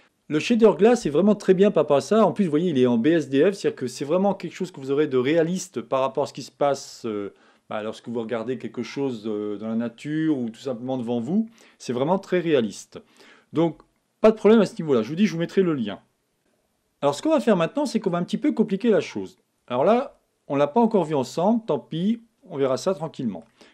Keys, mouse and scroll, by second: 20.1 Tab, 20.8-22.8 middle drag.